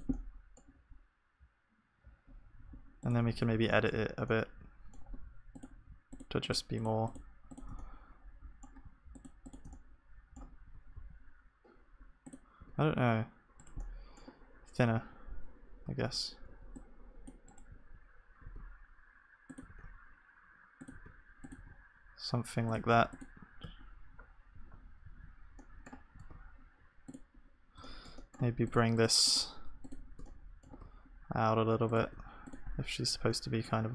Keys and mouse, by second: 0.0-3.4 drag, 0.0 g, 3.4 Tab, 6.7-33.9 drag.